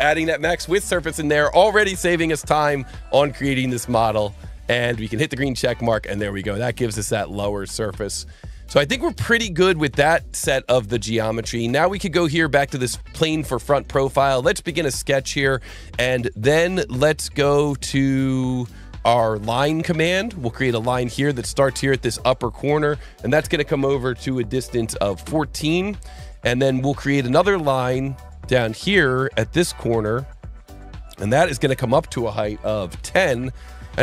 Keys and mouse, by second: 5.2 click, 8.4 click, 12.4 click, 14.2 click, 18.6 s, 19.3 click, 21.0 click, 24.8 KP_1, 25.0 KP_4, 25.2 KP_Enter, 26.3 Escape, 27.3 s, 28.2 click, 30.7 click, 32.9 KP_1, 33.0 KP_0, 33.1 KP_Enter, 33.5 Escape.